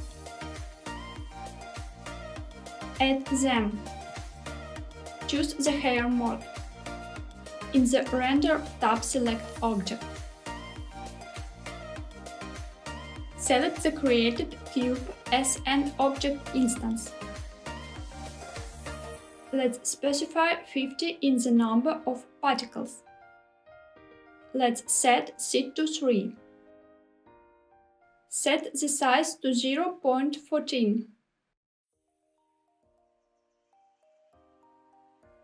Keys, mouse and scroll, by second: 2.9 click, 6.5 click, 7.7 click, 9.2-9.9 scroll down 2, 10.1-12.8 drag, 14.2 click, 19.4-23.7 drag, 25.1-27.7 drag, 28.5-35.3 drag.